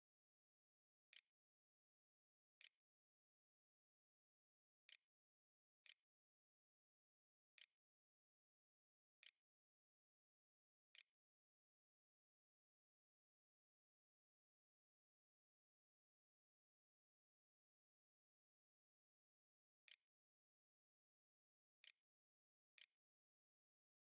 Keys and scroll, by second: 0.0-0.4 typing, 0.9 Tab, 2.4 =, 4.7-12.7 typing, 18.4-24.0 typing, 19.3 Return.